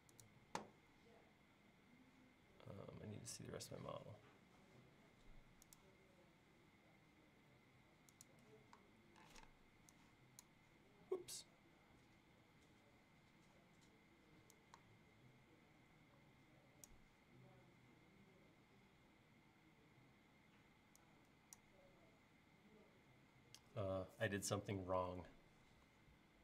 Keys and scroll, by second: 3.5 q, 9.3 p.